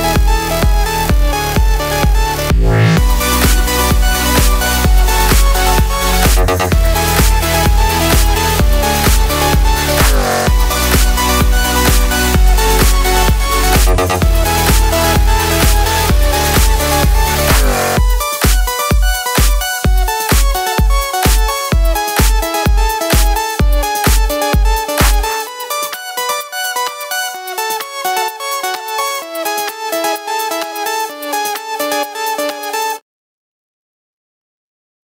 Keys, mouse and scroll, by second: 0.0 click, 0.2 click, 0.7 click, 0.8 click, 1.7-8.2 middle drag, 8.0 2, 8.2 click, 8.4 shift+s, 9.0 middle click, 9.5 click, 9.8 3, 9.9 click, 10.2 ctrl+click, 10.6 ., 11.2-13.2 middle drag, 11.7 r, 13.0 2, 13.2 click, 13.4 ctrl+click, 14.0 v, 14.8 click, 15.0 ctrl+click, 15.2-17.3 middle drag, 15.6 r, 17.1 2, 17.3 click, 17.8 v, 18.0 click, 18.4 middle click, 18.8 click, 19.3 v, 20.8 click, 21.1 middle click, 21.3 3, 21.4 click, 21.6 ctrl+click, 22.0-24.5 middle drag, 22.5 r, 23.7 Escape, 24.5 click, 24.7 2, 24.8 click, 25.1 ctrl+click, 25.5 v, 25.6 click, 25.9 middle click, 26.7 click, 27.5 shift+click, 28.0 v, 28.2 click, 28.6 middle click, 29.0 3, 29.2 click, 29.4 ctrl+click, 29.6-32.0 middle drag, 29.9 e, 32.0 click, 32.0-33.2 middle drag, 33.2 Escape, 33.9 ctrl+z, 34.1-34.6 scroll up 1, 34.6 2, 34.8 click.